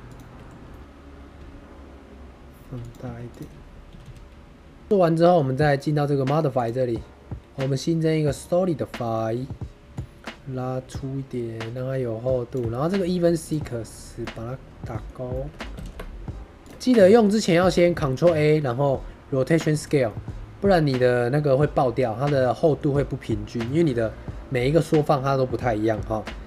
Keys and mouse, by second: 0.0 shift+click, 0.7 click, 0.8 y, 1.3 s, 2.7 click, 2.9 2, 3.3 click, 3.8 g, 3.9 g, 4.8 middle click, 6.5-8.3 drag, 8.9 middle click, 10.0-12.4 shift+drag, 13.3 click, 14.1-15.0 middle drag, 15.2 shift+middle click, 15.4 middle click, 15.7 ctrl+a, 16.9-17.3 middle drag, 17.5 middle drag, 17.8 ctrl+a, 20.0 middle drag, 22.5 middle drag, 23.6 middle drag.